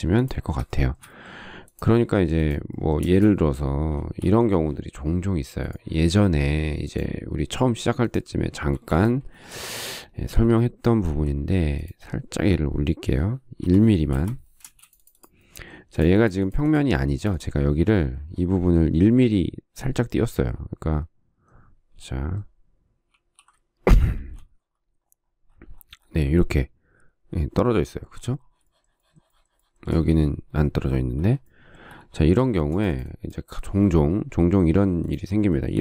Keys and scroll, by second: 3.3 space, 4.4 shift+r, 9.1 shift+space, 11.4 m, 13.9 1, 14.4 Return, 14.9 space, 23.4 alt+f, 24.5 shift+a.